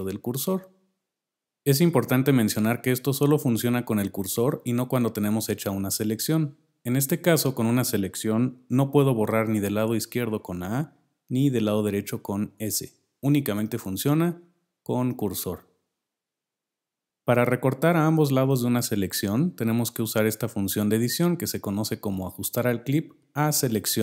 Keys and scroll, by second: 9.0 a, 11.7 s, 14.3 a, 15.6 s.